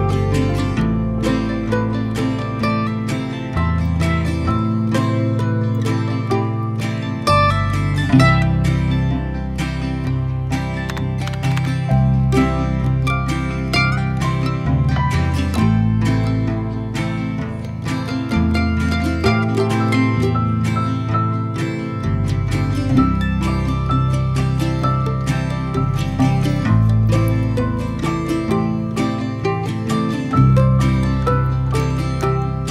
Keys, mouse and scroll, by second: 2.7 a, 4.0-5.8 drag, 5.8 middle click, 6.5 Tab, 7.0-8.9 middle drag, 8.9 click, 9.0 click, 13.1 shift+right click, 13.7 shift+a, 14.9 shift+a, 15.5-17.2 middle drag, 17.2 click, 19.4 click, 21.1 click, 21.6-22.1 scroll up 2, 22.6 click, 24.7 s, 26.9 s, 29.0-29.3 scroll down 1, 29.3 g, 31.1 middle click, 31.9 Tab, 32.0 a.